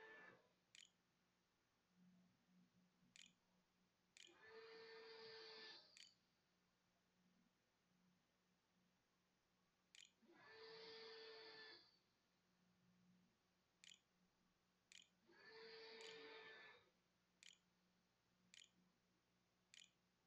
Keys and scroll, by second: 0.0-4.7 typing, 5.8-7.4 typing, 9.4 Tab, 9.9 Tab, 11.2-17.0 typing, 16.1 shift+Return, 17.8 Return, 18.7 shift+Return, 18.9 shift+\, 19.2 shift+=.